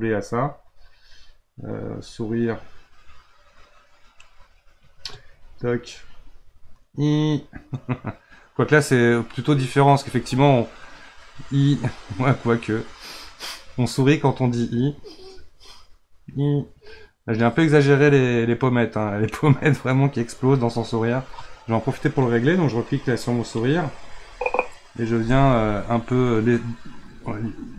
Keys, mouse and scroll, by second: 6.1 click, 23.2 click, 26.3-27.6 middle drag, 27.6 shift+click.